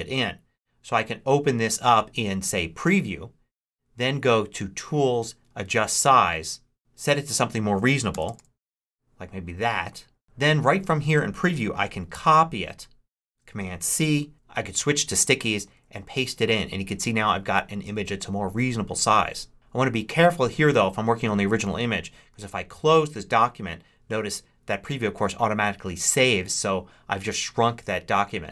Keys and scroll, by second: 7.8-8.6 typing, 12.0 super+c, 14.3 super+Tab, 15.5 super+v, 22.2 super+w.